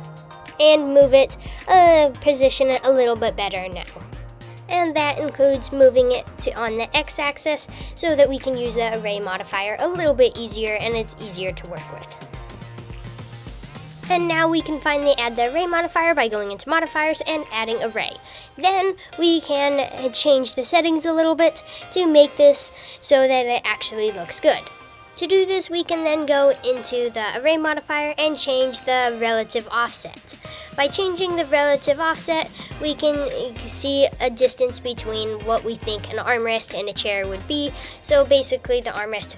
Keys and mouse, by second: 3.3 g, 10.4 g, 15.5 click, 26.9-29.7 drag, 36.3 click, 39.1 click.